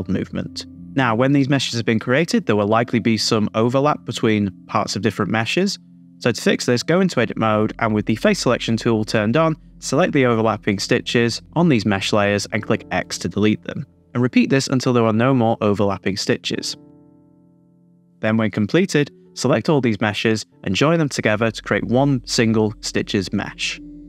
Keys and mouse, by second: 0.0 middle click, 0.2 shift+z, 0.7 middle click, 4.0 middle click, 5.0-6.2 middle drag, 6.5 click, 6.7 Tab, 6.7 middle click, 7.1 click, 7.3 middle click, 7.5 middle click, 8.0 middle click, 9.9 Tab, 10.1 Tab, 10.1 middle click, 10.5 Tab, 12.8 x, 14.1 middle click, 14.7 x, 14.9 x, 15.3 x, 15.4 shift+click, 15.8 Tab, 16.2 super+z, 16.2 click, 16.6 middle click, 16.9 middle click, 17.6 middle click, 17.8 middle click, 18.0 shift+click, 18.7 m, 19.2 BackSpace, 20.9 right click, 22.0 click, 22.3-22.7 drag, 23.2 click.